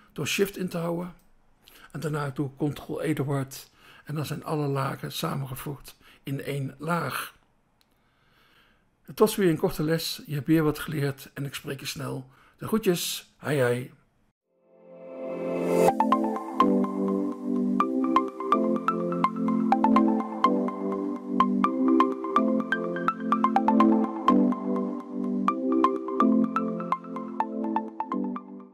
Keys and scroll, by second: 3.0 ctrl+e.